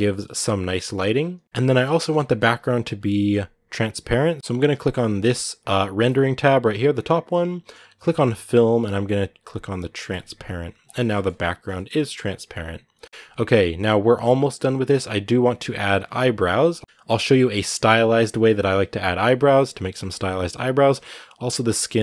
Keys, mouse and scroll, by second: 0.9 scroll down 2, 1.4 ctrl+s, 2.0-4.4 shift+middle drag, 4.4-9.9 drag, 10.9-11.9 shift+middle drag, 11.9-13.8 scroll up 1, 14.3-16.8 right drag, 16.8-22.0 shift+middle drag.